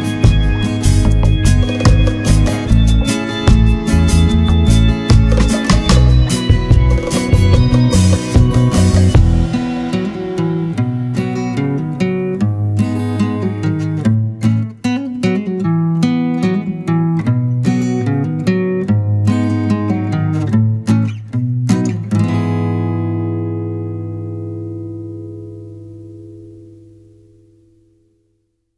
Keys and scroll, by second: 1.2 ctrl+=, 6.5 ctrl+-, 7.6 ctrl+0, 8.7 ctrl+=, 9.0 ctrl+space, 9.3 ctrl+=.